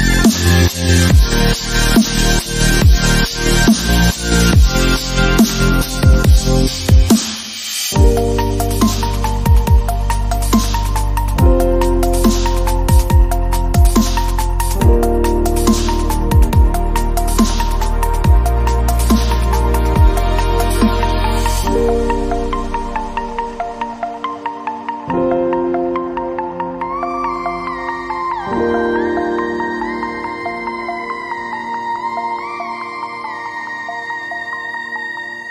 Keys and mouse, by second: 1.1 click, 1.2 space, 1.3 space, 1.9 click, 1.9 ctrl+e, 2.1 click, 3.0 ctrl+Tab, 3.5 click, 3.9 shift+d, 5.1 e, 5.5 s, 6.1 s, 7.1 ctrl+KP_Add, 8.4 z, 9.1 click, 10.1 click, 10.7 KP_Decimal, 12.3 ctrl+KP_Add, 13.5-17.7 typing, 14.3 ctrl+l, 17.5 click, 18.8 ctrl+Tab, 19.5 click, 19.5 right click, 19.6 s, 20.8 ctrl+Tab, 21.2 ctrl+l, 21.5 g, 22.0 click, 22.3 u, 22.6 s, 23.0 g, 24.1 middle click, 24.6 click, 24.7-26.9 typing, 26.1-26.9 drag, 27.4 click, 27.6 Tab, 28.4 click, 29.3 ctrl+s, 33.0 middle click, 33.4 Tab, 33.5 a, 33.9 Tab, 34.5-35.5 middle drag.